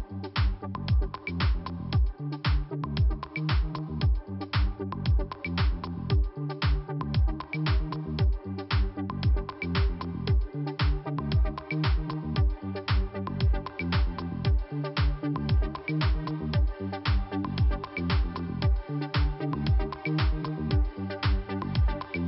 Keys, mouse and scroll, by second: 0.1 click, 1.2 click, 2.3 click, 5.0 click, 6.3 click, 6.4 click, 7.3 click, 8.6 click, 11.0 click, 11.4 double click, 11.6 double click, 11.7 double click, 12.3 click, 14.0 click, 15.7 click, 15.7 click, 16.7 click, 16.8 click, 17.7 click, 18.7 click, 19.5 click, 19.6 click, 20.4 click, 21.1 click, 21.7 click.